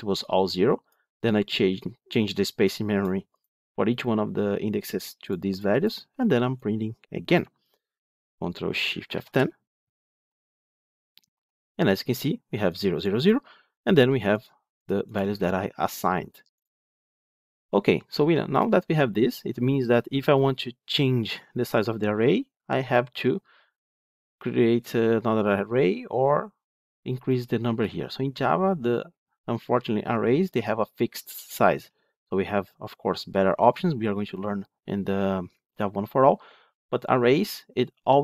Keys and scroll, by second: 9.0 ctrl+shift+F10.